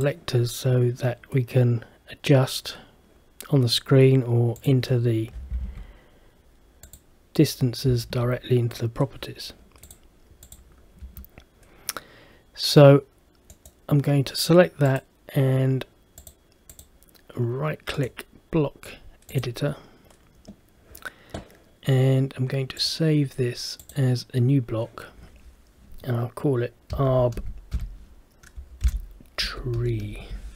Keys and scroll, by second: 11.1 Escape, 29.0 shift+-.